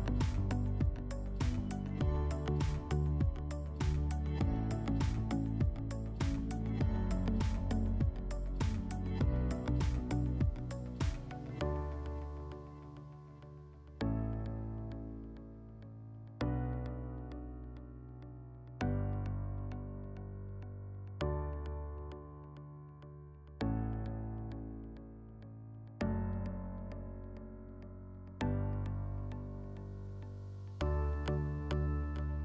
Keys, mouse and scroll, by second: 0.0 click, 0.4 click, 0.6 click, 1.1 click, 1.3 click, 2.2 click, 3.3 click, 3.7 click, 4.0 click, 4.9 click, 5.2 click, 5.8 click, 6.1 click, 6.4 click, 7.9 click, 9.0 click, 11.0 click, 11.7 click, 11.9 click, 12.3 click, 12.6 click, 13.0 click, 13.8 click, 14.4 click, 15.0 click, 16.4 click, 16.7 click, 17.5 click, 19.4 click, 20.3 click, 22.5 click, 23.1 click, 23.8 click, 24.4 click, 24.6 click, 25.2 click, 25.4 click, 25.8 click, 26.4 alt+middle click, 26.9 click, 27.2 click, 27.4 click, 27.7 click, 27.9 click, 28.3 click, 28.5 click, 28.8 click, 29.1 click, 29.4 click, 30.0 alt+middle click, 30.2 click, 30.8 click, 31.7 alt+middle click.